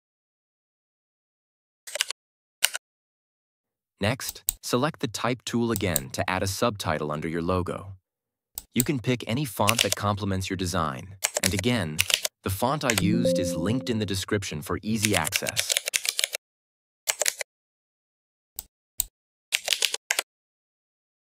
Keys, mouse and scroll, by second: 1.8 ctrl+Return, 1.9 ctrl+-, 2.5 Down, 4.2 click, 9.5-10.2 typing, 9.6 click, 11.3 ctrl+a, 11.7-12.5 typing, 12.8 Return, 14.8-16.6 typing, 17.2 ctrl+a, 18.5-19.1 click, 19.2-20.2 typing.